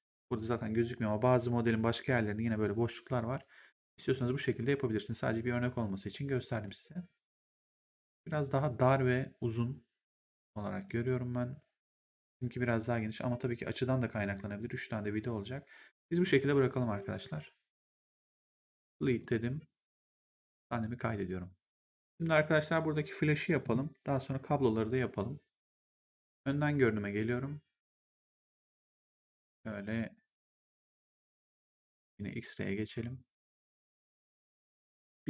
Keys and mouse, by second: 3.2 click, 7.7 click, 10.7 click, 11.9 click, 16.2 click, 18.2 click, 20.5 click, 22.0 click, 26.2 right click, 27.9 click, 30.6 click.